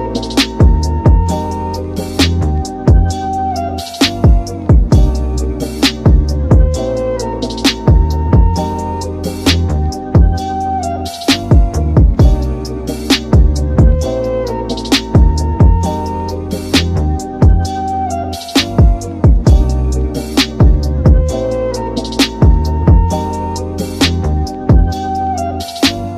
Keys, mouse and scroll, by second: 1.7 KP_7, 3.4-4.8 middle drag, 4.8-5.6 scroll up 6, 5.2 shift+middle drag, 5.7-7.4 shift+middle drag, 7.4-12.3 drag, 12.3-12.8 scroll down 6, 12.8-13.4 middle drag, 13.4 KP_7, 14.3-15.2 middle drag, 15.2 click, 15.5 g, 17.5 scroll down 6, 17.9 middle click, 18.2 shift+a, 20.9-22.1 shift+middle drag, 22.1 ctrl+alt+KP_0, 23.2 space, 26.0 space.